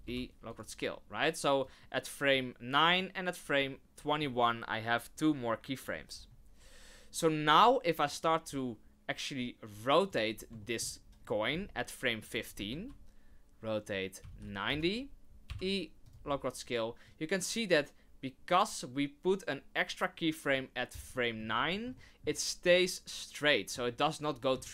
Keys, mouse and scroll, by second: 0.0 i, 1.6 click, 2.9 click, 6.1 scroll down 3, 7.6 click, 8.5 click, 10.6 shift+middle click, 10.9-11.2 scroll down 3, 11.2 middle click, 12.5 r, 15.4 i, 17.0 click, 21.1 middle click, 21.6-21.9 scroll up 2, 21.9 shift+middle click, 22.7 middle click, 24.6 shift+middle click.